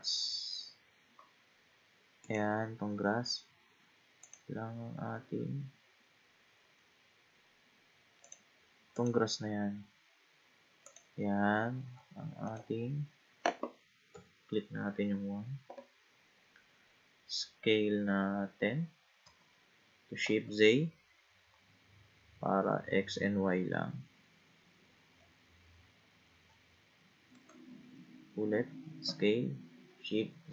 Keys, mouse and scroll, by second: 0.7-2.2 scroll up 3, 2.2 click, 4.2 click, 8.2 click, 9.0 click, 10.9 click, 11.7-12.5 scroll up 6, 12.5 click, 14.1 KP_1, 19.2 s, 29.0 s.